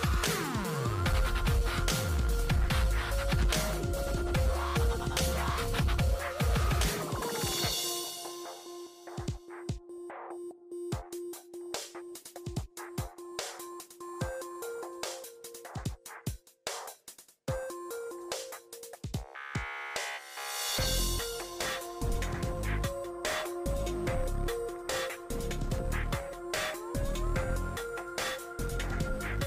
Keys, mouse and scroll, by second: 0.0 3, 0.7 click, 3.2 click, 3.6 click, 6.2 -, 7.5 typing, 7.8 Tab, 8.7 typing, 10.8-11.5 typing, 13.1-18.3 drag, 18.3 2, 20.9-28.0 drag, 29.2 click.